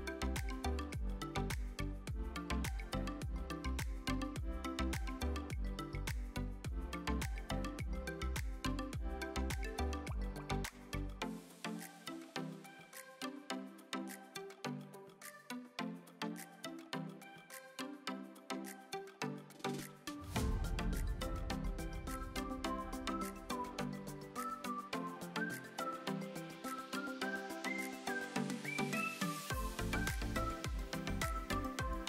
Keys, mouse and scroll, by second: 0.9 click, 2.9 click, 3.1 click, 9.3 click, 15.9 click, 17.3-18.5 middle drag, 20.0-20.3 shift+middle drag, 20.4 scroll up 1, 20.7-21.3 middle drag, 21.4 shift+middle drag, 21.8-23.1 scroll up 2, 23.1 s, 24.7 click, 25.7 ctrl+a, 27.0-27.5 middle drag.